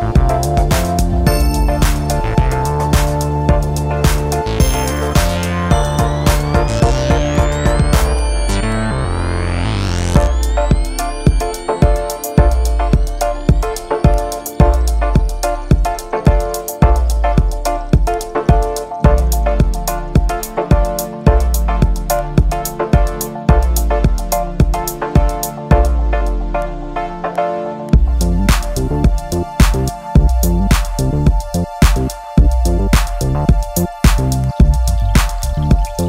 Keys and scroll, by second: 31.8 super+i.